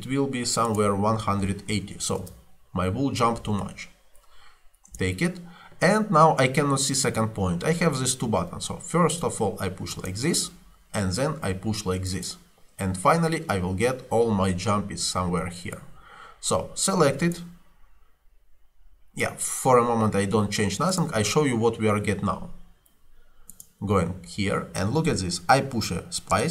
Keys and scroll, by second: 1.2-2.4 typing, 4.9 Return, 26.4 space.